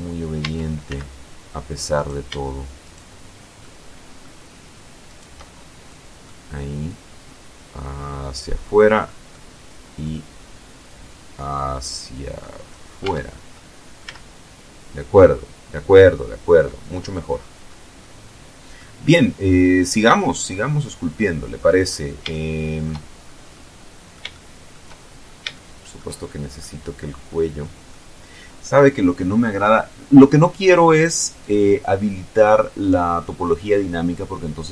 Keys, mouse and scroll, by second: 0.2 z, 3.0 shift+middle click, 4.4 shift+right click, 4.8-5.3 shift+scroll down 3, 5.3 middle click, 6.3-8.0 drag, 8.2 middle click, 9.4-12.3 drag, 12.4 Tab, 13.0 middle click, 13.4 z, 14.4-15.3 scroll down 2, 15.4 middle click, 16.2-17.3 scroll up 2, 17.4 middle click, 18.4-18.7 scroll up 2, 21.7-22.8 shift+middle drag, 22.8 scroll up 1, 22.9-24.3 drag, 24.3-24.9 shift+scroll up 4, 24.9 shift+middle click, 25.6-26.0 shift+scroll up 2, 26.0-27.4 middle drag, 27.4-28.1 scroll down 2, 30.7 click.